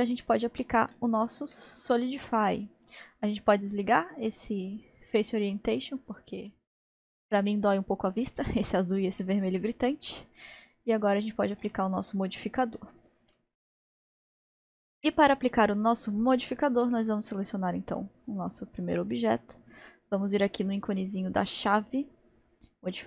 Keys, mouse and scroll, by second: 4.5-7.5 drag, 7.7 click, 8.2-12.3 middle drag, 12.3-12.8 scroll up 1, 12.8-14.5 middle drag, 17.3 click.